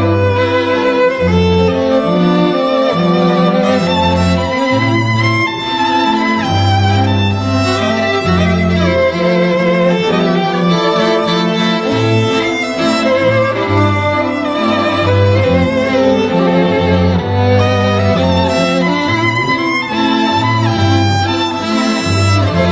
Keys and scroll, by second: 2.6 space, 11.7 e.